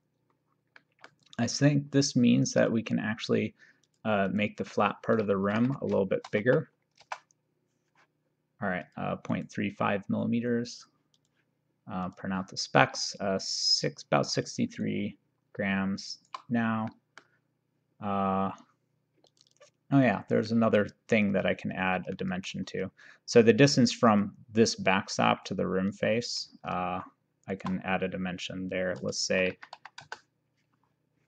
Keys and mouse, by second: 0.8 middle click, 2.6 click, 3.9 click, 5.5 Right, 5.7 Left, 6.3 typing, 8.9 click, 9.3 right click, 10.8 click, 14.6 click, 14.9 shift+right click, 16.9 middle click, 19.3 click, 20.6 middle click, 22.2 middle click, 24.1 click, 26.0 click, 27.0 shift+h, 29.3 KP_1, 29.6 KP_Decimal, 29.8 KP_5.